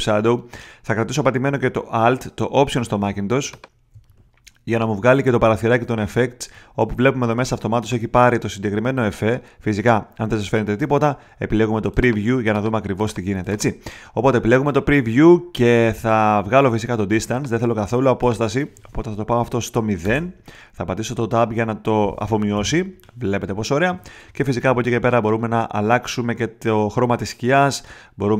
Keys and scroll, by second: 20.0 0, 22.5 Tab.